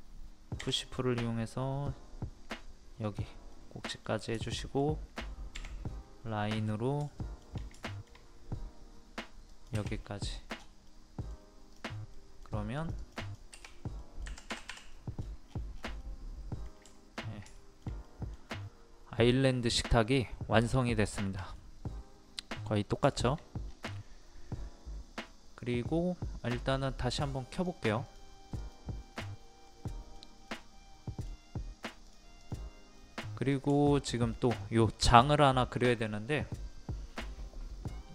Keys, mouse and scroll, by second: 3.5-5.5 middle drag, 6.5 click, 7.1 shift+middle click, 7.7 shift+middle click, 9.5 click, 10.0-10.3 scroll down 1, 10.6 scroll up 1, 10.9 middle click, 11.2-11.7 scroll down 1, 11.7 click, 12.1 middle click, 12.8 click, 14.0 middle click, 14.9 middle click, 15.1 scroll down 1, 15.3 scroll up 1, 15.4-16.0 scroll down 1, 16.0 middle click, 16.7 scroll down 1, 16.9 shift+middle click, 17.6 shift+middle click, 18.5-18.9 scroll up 1, 19.2 middle click, 20.2-20.6 scroll down 1, 21.1 shift+middle click, 23.1 shift+middle click, 23.6-26.9 scroll down 1, 26.9 click, 29.7-31.5 middle drag, 32.0 click, 33.0 middle click, 33.7 shift+middle click, 36.2-36.7 scroll up 1.